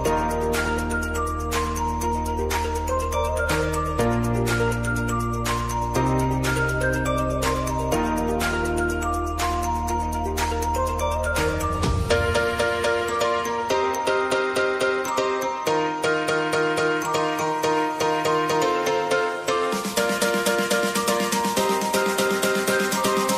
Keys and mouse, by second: 3.4 click, 4.5 F9, 5.2 click, 5.8 k, 6.8-11.2 drag, 11.2 j, 13.3-14.9 drag, 14.9 k, 17.1-18.6 drag, 18.6 k, 19.9 click, 20.8 ctrl+c, 21.1 ctrl+v.